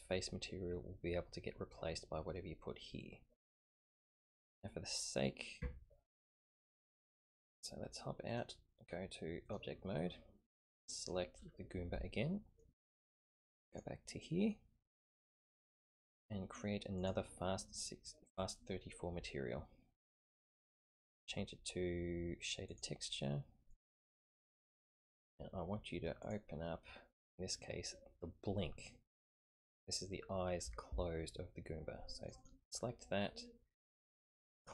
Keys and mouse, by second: 5.6 Tab, 7.1 click, 8.3-9.6 drag, 11.0 click, 12.1-12.6 shift+middle drag, 13.7 click, 17.0 click, 20.1-22.8 drag, 23.7 click, 26.2 click, 34.6 click.